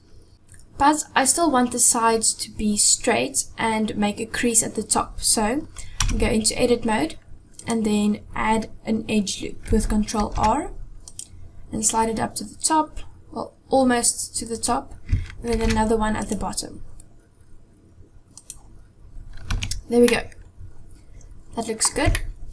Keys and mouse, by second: 6.2 Tab, 7.6 click, 10.2 ctrl+r, 15.5 ctrl+r, 19.5 Tab, 20.1-21.9 middle drag, 22.1-22.5 shift+middle drag.